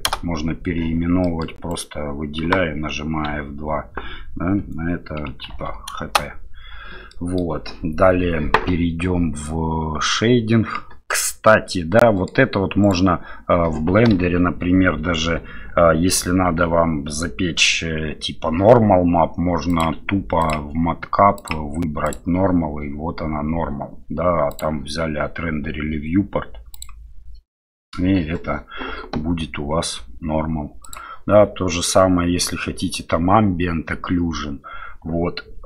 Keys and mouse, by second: 1.2 middle click, 1.7 right click, 7.1 middle click, 11.1-12.3 middle drag, 12.8 click, 15.2 KP_7, 19.7-26.9 drag.